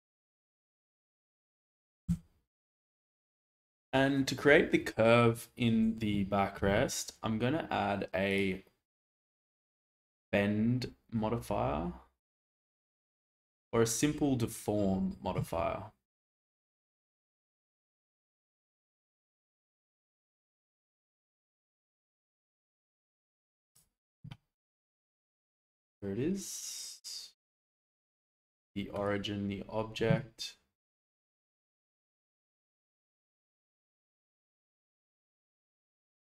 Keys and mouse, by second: 2.1 Tab, 6.6 alt+z, 9.1-23.7 drag, 31.6 click, 32.0 click, 35.0-36.3 drag.